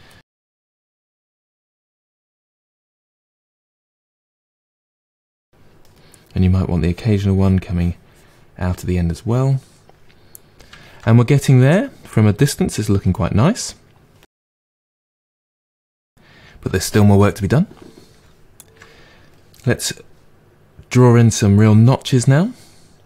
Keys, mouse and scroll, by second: 0.3 middle click, 0.8-2.6 drag, 2.6 middle click, 2.9 click, 3.1 middle click, 3.4-5.0 drag, 5.0 middle click, 5.3 click, 5.9 middle click, 6.7-9.7 drag, 9.7-14.6 middle drag, 15.9-21.9 middle drag.